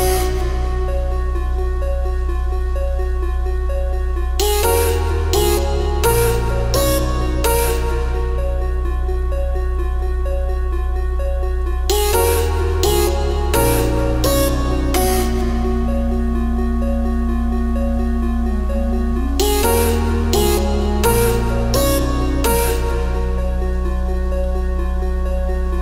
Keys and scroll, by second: 1.9 ctrl+z, 6.7 ctrl+z, 8.6 ctrl+z, 16.6 ctrl+z, 21.6 ctrl+z.